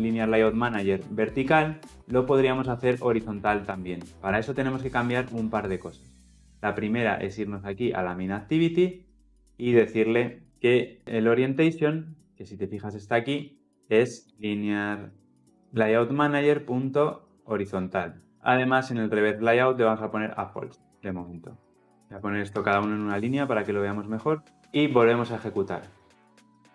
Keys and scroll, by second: 11.7 ctrl+p, 16.2 Return, 19.9 Return, 20.9 ctrl+alt+l, 21.0 ctrl+alt+o, 22.0 ctrl+alt+l, 26.2 shift+F10.